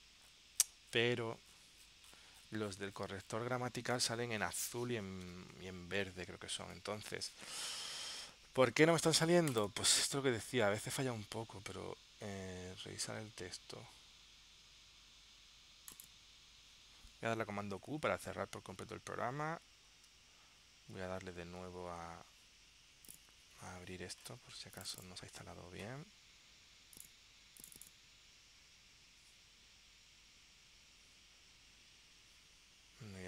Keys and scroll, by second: 18.0 super+q, 20.1 super+Tab, 22.0 super+w.